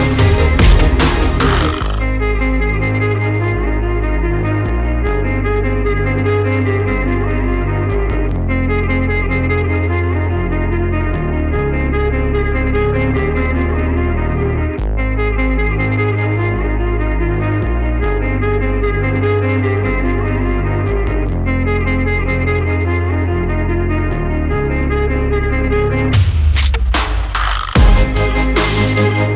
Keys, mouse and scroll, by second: 9.4-10.4 right drag, 9.8 x, 10.8 right click, 13.6 Tab, 14.9 x, 17.2 z.